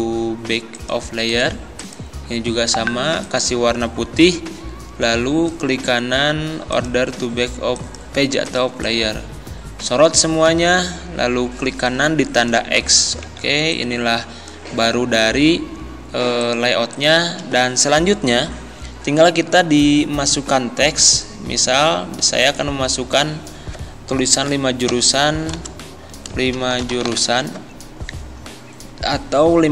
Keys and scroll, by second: 13.3 z, 24.9 5, 25.6 space, 26.6 shift+j, 26.8 u.